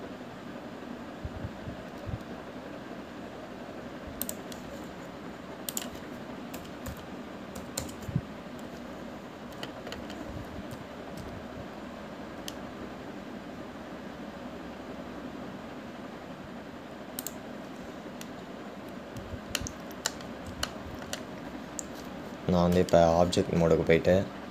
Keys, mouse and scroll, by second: 6.9-10.0 drag, 19.7-20.8 scroll up 2, 20.8 middle click, 21.4 click.